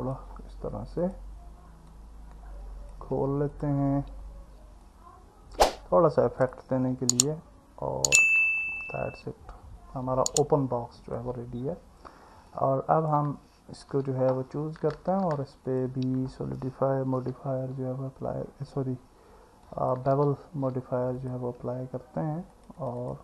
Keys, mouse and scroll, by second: 1.1 click, 2.0 click, 8.8-11.2 alt+middle drag, 12.5 alt+middle click, 13.9 Tab, 15.8-21.3 drag, 22.6 click, 22.8 click, 23.0 click.